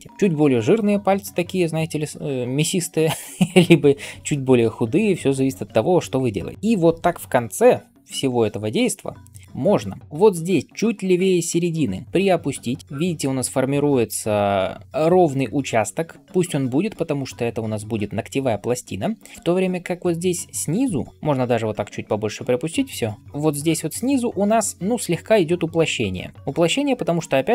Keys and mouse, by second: 8.4-8.7 ], 8.9 ], 9.0 ], 21.0 ], 21.1 ], 23.6 [, 23.7 [, 26.3 [, 26.4 [.